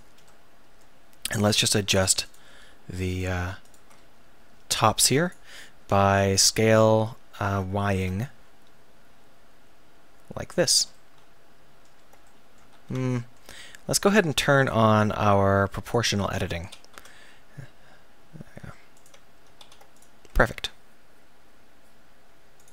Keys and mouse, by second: 0.4 middle click, 1.5-5.6 middle drag, 5.6-7.0 drag, 6.6 s, 10.7-11.8 drag, 12.5 click, 12.8 ctrl+z, 13.3 click, 14.6-15.9 middle drag, 16.1 click, 16.6 s, 19.6 ctrl+s.